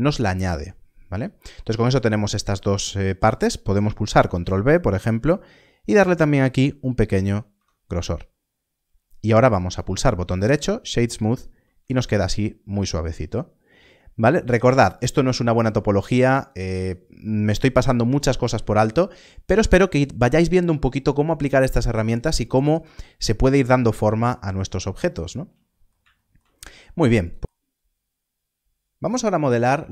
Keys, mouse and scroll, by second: 4.2 ctrl+b, 7.1 ctrl+b, 7.5 Tab, 8.0 scroll down 1, 9.6 scroll up 1, 9.6 right click, 11.7 alt+a, 12.0 scroll down 1, 14.9-18.0 scroll down 1, 18.6 alt+a, 25.9 alt+a, 27.2 click.